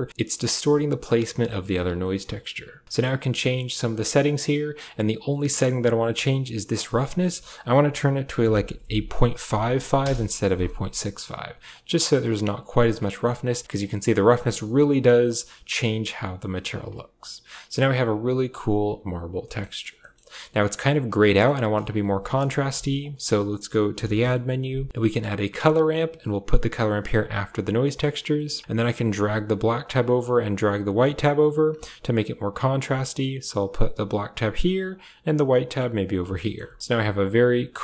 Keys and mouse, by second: 0.3 click, 3.4 middle click, 6.6-9.9 drag, 9.3 5, 11.6-12.7 drag, 13.6-16.6 drag, 18.4 click, 19.8 click, 21.2 middle click, 21.5 click, 22.1 g, 22.8 shift+a, 27.0 click, 27.7 middle click, 28.2 middle click, 28.8-30.0 drag, 30.7-31.5 drag, 32.5 click, 34.7-35.9 drag.